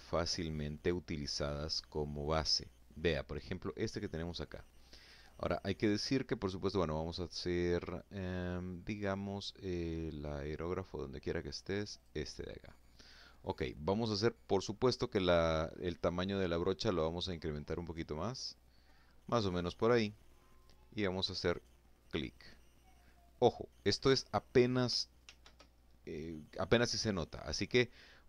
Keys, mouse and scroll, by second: 0.5 click, 10.3 click, 15.1-16.5 drag, 19.9 click, 23.6 ctrl+z.